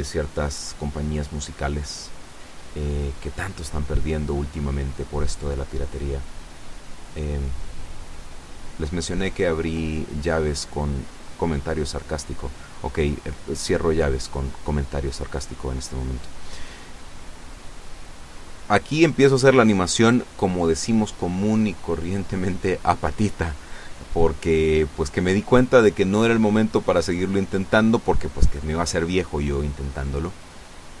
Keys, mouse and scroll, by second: 0.3 g, 2.3 click, 3.0 g, 3.7 click, 4.2 e, 5.2 r, 8.5 click, 9.1 g, 12.6 click, 13.7 r, 15.1 click, 18.1-19.5 drag, 22.0 i, 24.8 click, 26.5 click.